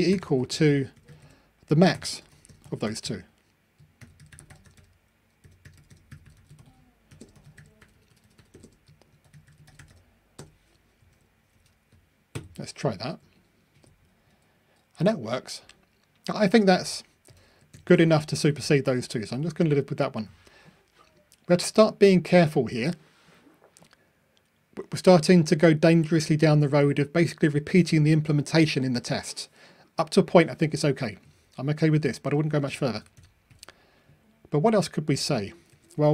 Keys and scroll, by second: 12.3 super+F9, 13.8 ctrl+r, 35.7 super+c.